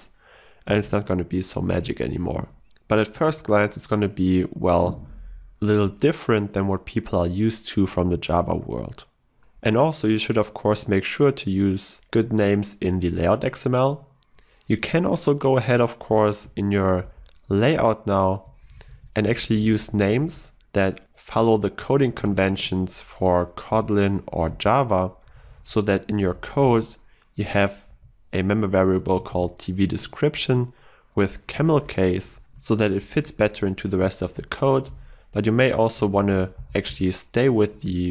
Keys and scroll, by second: 1.9 ctrl+e, 3.2 ctrl+w, 16.4 ctrl+e, 22.5 Escape, 23.8 ctrl+e, 29.4 ctrl+w, 31.7 ctrl+shift+Left, 33.2 ctrl+shift+Left, 34.2 ctrl+shift+Left, 34.3 ctrl+e.